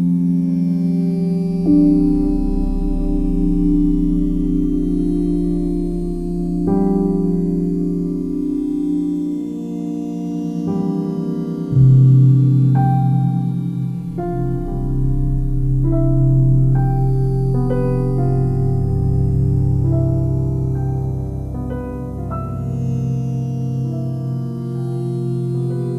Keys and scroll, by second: 18.5 ctrl+alt+z.